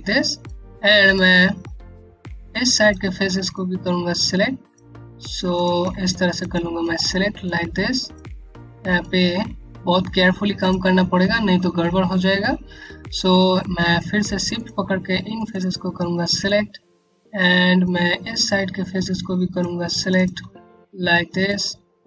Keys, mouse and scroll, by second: 0.0 click, 1.2 scroll up 1, 1.8 alt+click, 3.0 alt+click, 3.4-4.2 typing, 5.1 click, 5.6 shift+click, 6.5 scroll down 1, 7.0 click, 7.9 typing, 8.7 click, 11.9 scroll up 1, 14.1 shift+click, 14.9 click, 15.5 scroll down 1, 15.9 click, 16.4 Home, 16.9 scroll up 1, 17.4 click, 17.5-18.3 typing, 19.0 click, 19.5 shift+click, 20.2 click, 21.8 alt+click.